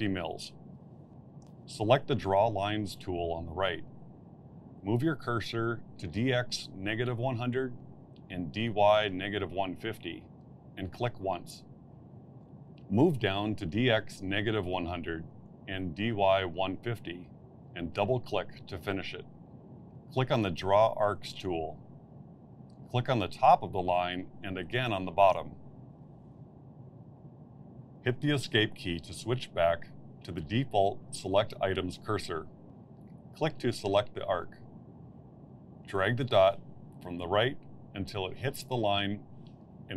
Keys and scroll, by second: 30.7 Escape.